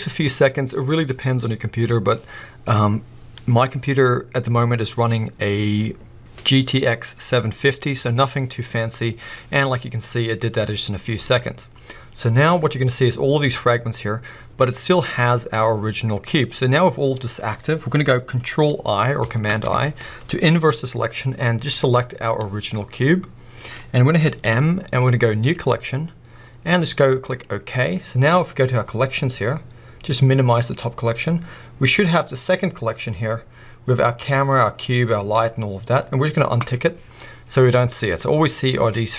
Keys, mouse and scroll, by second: 19.5 ctrl+i, 21.5 g, 23.7-30.6 right drag, 24.4 m, 30.6 click, 36.6 click, 37.1-37.5 scroll down 2, 37.5-39.1 middle drag, 38.1-38.9 scroll up 2.